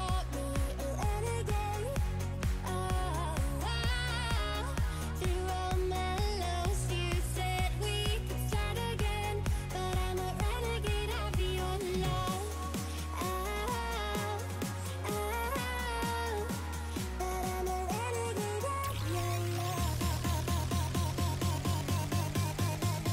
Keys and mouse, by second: 1.0 click, 2.1 click, 4.5 click, 8.7 click, 10.2 click, 11.9 click, 13.0 click, 15.0 right click, 15.4 click, 15.8 click, 16.3 click, 18.2 Return, 18.8 click, 19.5 ctrl+t, 19.9 click, 21.1 shift+click, 21.4 Return, 21.8 click.